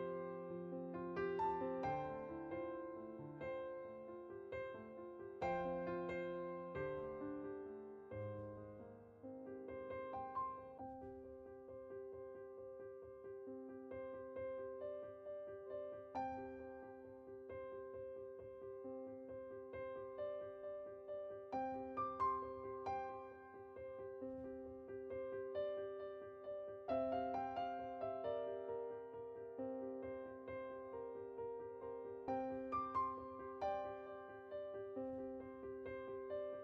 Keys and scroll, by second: 18.4 Tab.